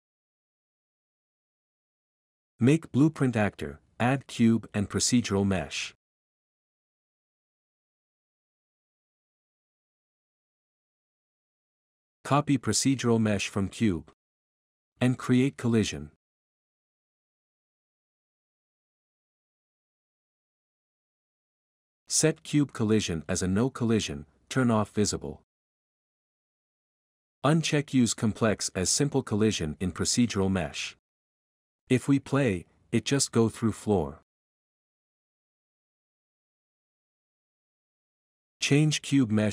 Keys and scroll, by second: 4.7-6.0 typing, 9.3-10.5 typing, 14.6-16.3 typing, 16.3 Return, 32.9-33.7 typing, 35.3 5, 35.7 ctrl+s, 38.5 Escape.